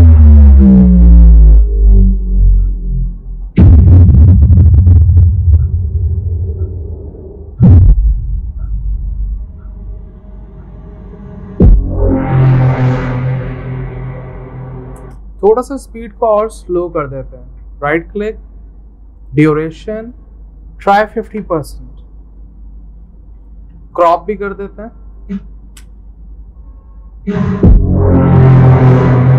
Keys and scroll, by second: 20.8-21.6 typing, 23.0-24.2 typing, 24.4 ctrl+x.